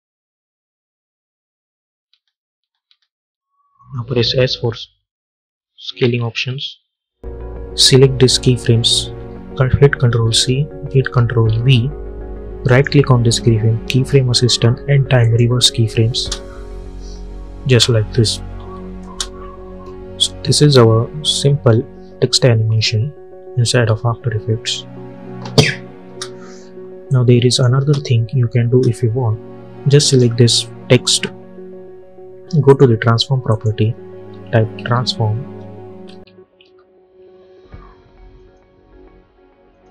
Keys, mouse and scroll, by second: 2.0 space, 3.7 click, 5.9 s, 7.7-10.1 drag, 10.1 ctrl+c, 11.4 ctrl+v, 12.5 right click, 15.1 click, 16.0 space, 18.5 n, 18.9 space, 25.9 space, 27.0 click, 27.7 space, 29.9 click, 32.5 click, 34.2-36.5 typing, 38.3-39.9 drag.